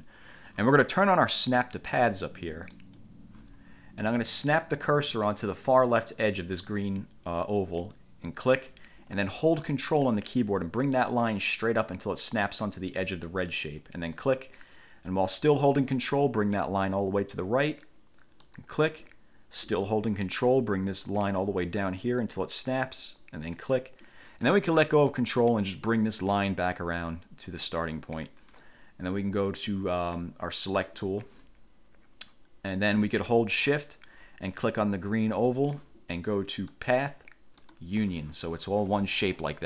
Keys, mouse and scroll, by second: 2.9 click, 8.0 click, 14.3 ctrl+click, 18.6 ctrl+click, 23.7 ctrl+click, 27.6 click, 30.9 click, 34.8 shift+click, 36.9 click, 37.8 click.